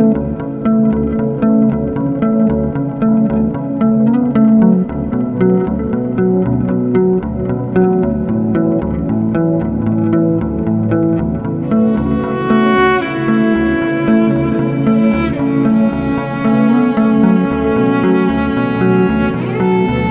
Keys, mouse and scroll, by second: 0.1 shift+g, 2.5-5.6 right drag, 5.6 click, 7.0 shift+g, 10.6-13.6 right drag, 13.6 a, 15.2 x.